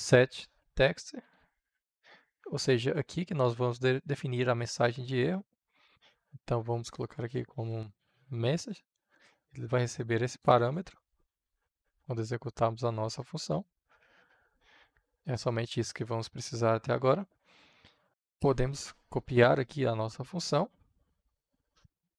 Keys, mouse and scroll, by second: 0.5 Return, 1.7 shift+9, 6.0-7.5 drag, 7.2-8.4 typing, 9.1 Return, 10.2-14.4 drag, 18.1 click, 19.2 ctrl+c, 20.9 click, 21.7 Return.